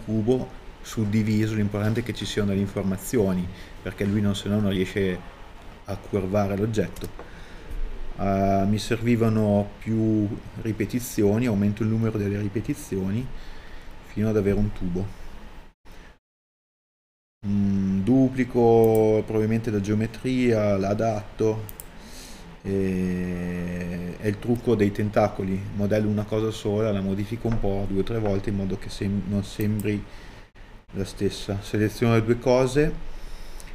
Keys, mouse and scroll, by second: 18.9 KP_3, 19.9 scroll up 1, 20.3 middle click, 31.2 middle click, 32.6 KP_1.